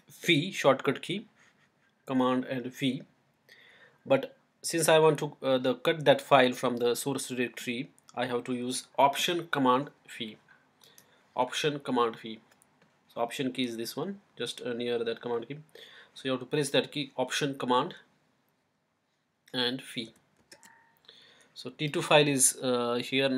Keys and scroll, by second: 20.3 alt+super+v.